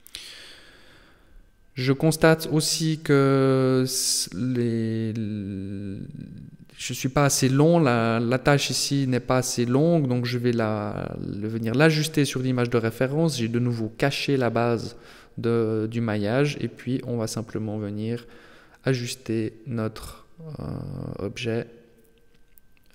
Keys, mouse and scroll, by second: 0.2 middle click, 2.6 b, 4.5 b, 6.0 KP_7, 7.0 shift+middle click, 8.4 g, 12.8 KP_3, 13.8 shift+middle click, 14.8-15.2 scroll up 2, 16.0 a, 16.2 b, 17.7 g, 21.3 g.